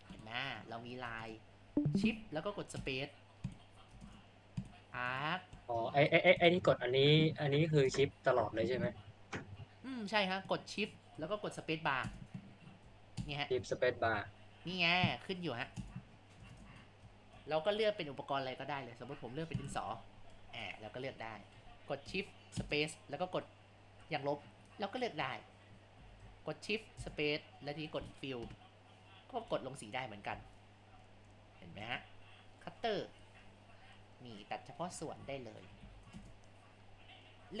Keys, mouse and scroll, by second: 10.7-12.0 drag, 12.0 shift+space, 13.2 shift+space, 16.1 shift+space, 16.5 shift+space, 20.4-21.4 drag, 22.6 shift+space, 24.7-26.0 drag, 26.0 ctrl+z, 28.7 KP_0, 29.6 click, 30.4 ctrl+z, 31.1 click, 31.3 click, 31.9 shift+space, 33.3-35.0 drag, 35.0 ctrl+z, 35.3 ctrl+z, 35.9 ctrl+z, 36.2 shift+space.